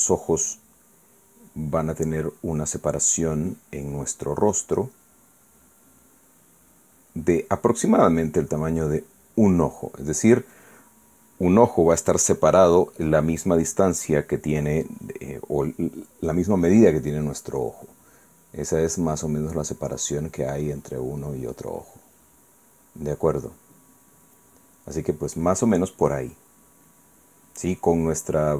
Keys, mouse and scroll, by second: 1.4-8.3 drag, 20.0-25.4 drag.